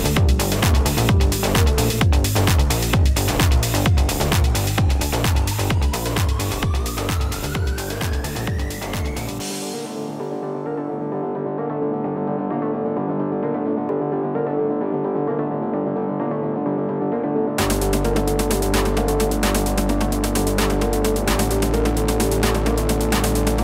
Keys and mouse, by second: 2.2 -, 2.4 space, 2.5 click, 2.7 space, 3.0 click, 3.1 space, 3.6 click, 4.3 typing, 4.7 ctrl+=, 8.3 typing, 10.5 -, 10.7 -, 11.1 ctrl+KP_0, 11.5 -, 12.7 click, 14.6 click, 15.3 space, 15.5 click, 16.1 ctrl+=, 20.4 ctrl+z, 23.3 space, 23.4 click, 23.5 space.